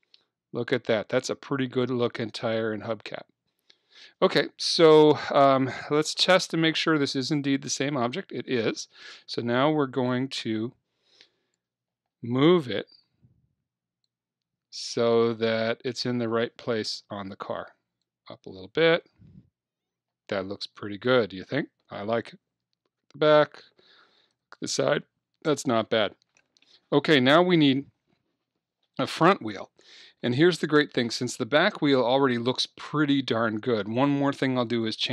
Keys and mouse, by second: 6.3-8.8 drag, 9.4 KP_3, 10.1-12.0 drag, 13.1 KP_1, 14.1 click, 16.9 KP_3, 18.1 click, 22.7 KP_1, 24.3 KP_3, 34.7-35.1 drag.